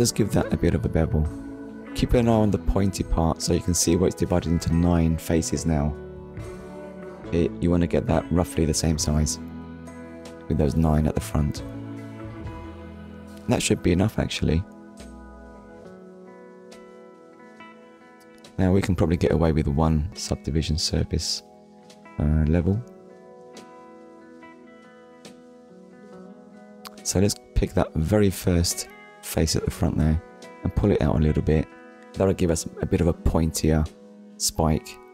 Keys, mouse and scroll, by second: 5.6 shift+click, 7.1 middle click, 9.3 click, 10.4 shift+middle click, 11.6 click, 12.0 middle click, 12.8 Tab, 17.7 click, 19.3 Tab, 19.8 middle click, 23.4 click, 24.9 click, 25.3 shift+middle click, 25.7 middle click, 26.4-26.8 scroll up 1, 27.0 click, 27.5 middle click, 28.7 click, 29.8 click, 35.0 Tab.